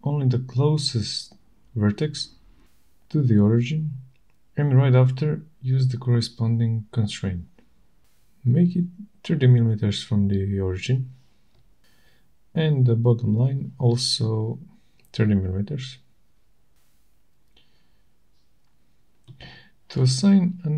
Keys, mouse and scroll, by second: 4.3 click, 6.3-7.3 typing, 10.5 click, 11.9 click, 13.6 click, 15.1 click, 17.1-18.8 typing.